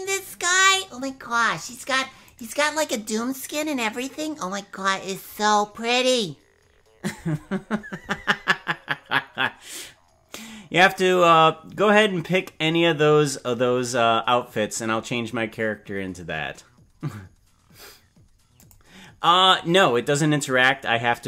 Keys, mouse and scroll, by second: 1.7 right click.